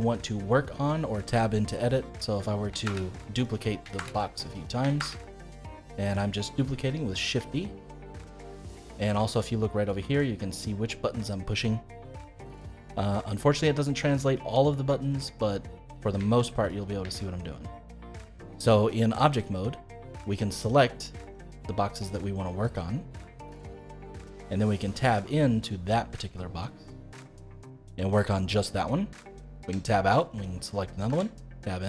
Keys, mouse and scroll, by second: 2.8 shift+d, 3.9 shift+d, 4.9 shift+d, 6.2-11.1 middle drag, 12.8-16.8 middle drag, 16.8 scroll down 1, 17.0-20.1 shift+middle drag, 20.6 click, 21.9 click, 22.6 click, 23.4 click, 24.0 click, 24.9 Tab, 25.3-29.6 middle drag, 29.6 Tab, 30.3 click, 31.0 Tab.